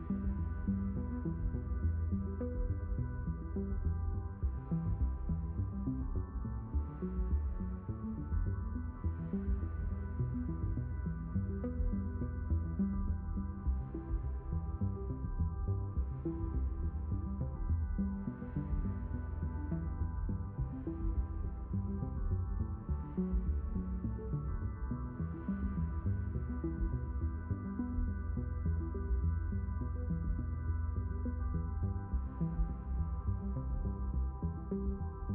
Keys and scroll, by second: 2.9 space, 27.5 ctrl+2, 28.9 Escape, 32.6 ctrl+2.